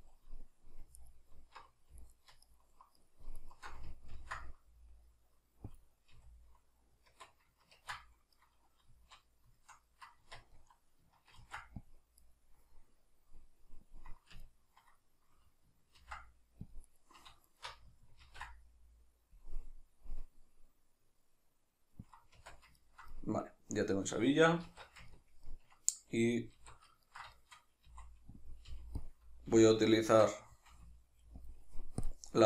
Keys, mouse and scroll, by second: 0.1 click, 1.0 alt+right click, 2.0 alt+right drag, 2.4 alt+shift+right drag, 3.0 alt+shift+right drag, 3.4 alt+shift+right click, 4.2 ctrl+b, 5.8 click, 6.2 a, 7.8 ctrl+2, 8.4-9.9 middle drag, 8.9 z, 10.3 Tab, 10.6 middle click, 11.4 ctrl+r, 12.4 right click, 13.9-14.5 drag, 14.5-17.0 ctrl+middle drag, 16.0 ctrl+r, 17.5 alt+shift+right click, 18.3 ctrl+b, 22.2 click, 22.4 Tab, 22.8-28.5 ctrl+middle drag, 24.7 alt+q, 26.6 alt+q, 27.9 s, 28.5 click, 28.7 g, 29.1 click, 30.0 shift+Tab, 30.7 g, 31.5 click.